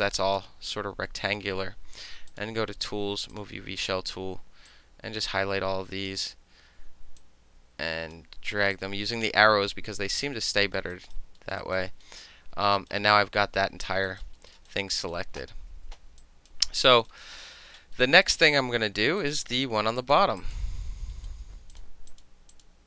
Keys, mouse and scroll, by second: 0.3-2.3 middle drag, 2.3 click, 2.4-2.7 middle drag, 3.3 click, 4.7-6.1 drag, 7.2 click, 8.7-10.2 drag, 10.5 alt+middle click, 10.9 alt+right click, 11.4 alt+middle click, 11.6 alt+right click, 12.0 alt+middle click, 12.4 alt+middle click, 12.7 alt+right click, 12.9-14.0 alt+middle drag, 14.0 alt+right click, 14.2 alt+middle click, 14.5 alt+middle click, 14.7 alt+right click, 15.0 alt+middle click, 16.2 alt+click, 16.5 alt+middle click, 16.9 alt+right click, 17.1 alt+middle click, 17.4 alt+middle click, 18.1-19.2 alt+middle drag, 19.2 alt+right click, 19.5 alt+middle click, 20.0 alt+click, 20.4 alt+drag, 21.7 alt+click, 22.1 alt+click, 22.5 alt+click.